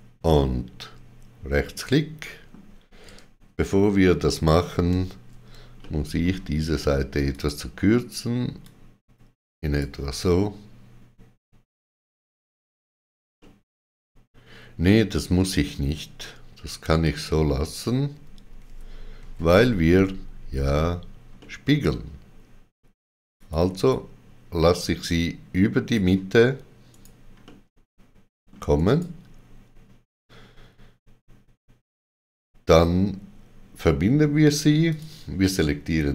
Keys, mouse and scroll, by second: 0.3 middle click, 4.4 ctrl+z, 5.7 middle click, 7.3 click, 8.6 click, 13.4 middle click, 17.0 click, 21.4 middle click, 21.4 click, 23.3 click, 23.7 click, 24.8 click, 26.8 right click, 27.4 middle click, 28.7 right click, 34.8 click, 34.8 right click, 34.8 middle click.